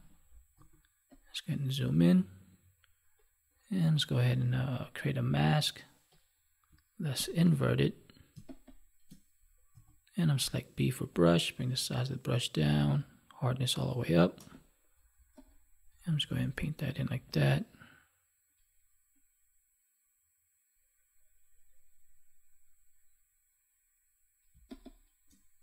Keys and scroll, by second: 7.1 ctrl+i, 24.4 space.